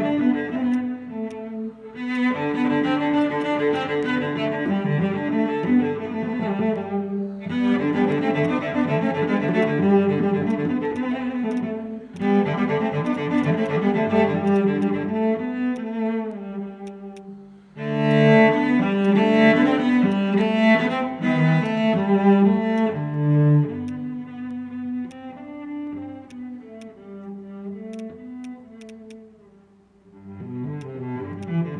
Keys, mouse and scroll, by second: 0.1-0.8 scroll down 1, 3.4 double click, 8.4 right click, 11.0 double click, 12.5 alt+click, 13.1 double click, 13.6 alt+click, 14.6 double click, 14.8 alt+click, 15.2 scroll up 1, 15.5 alt+middle click, 15.8 alt+click, 17.5 scroll up 1, 17.8 alt+middle click, 18.1 alt+click, 18.8 scroll up 1, 19.0 alt+click, 20.1 alt+click, 21.4 scroll down 1, 21.6 alt+click, 22.5 scroll up 1, 22.7 alt+click, 25.1 alt+click, 25.6 alt+middle click, 26.3 right click, 28.0 double click, 28.8 double click, 29.1 alt+click, 30.1 scroll up 1, 30.3 alt+middle click, 30.5 scroll down 1, 30.8 alt+click, 31.1 alt+middle click, 31.4 alt+click.